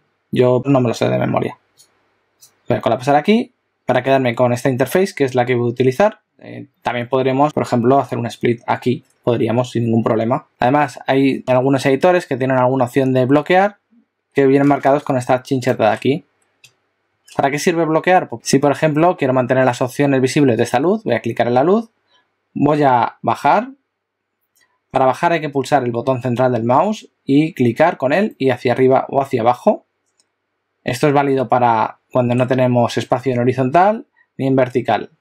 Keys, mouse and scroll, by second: 1.8 click, 8.2 click, 18.3 click, 20.7 click, 23.4 middle click, 28.5 middle click.